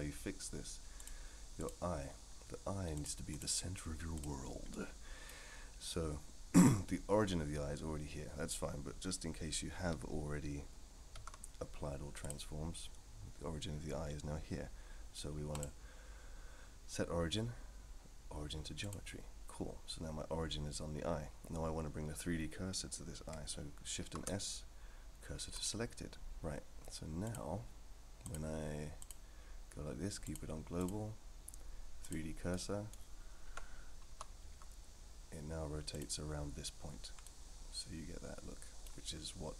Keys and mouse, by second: 1.0 click, 1.6 click, 3.1 click, 4.7-5.3 middle drag, 11.1 ctrl+a, 15.7-18.9 right drag, 24.0 shift+s, 28.4-29.1 drag, 30.4-32.1 drag, 32.5 middle click, 33.4 KP_3, 34.1 r, 37.2-38.8 middle drag.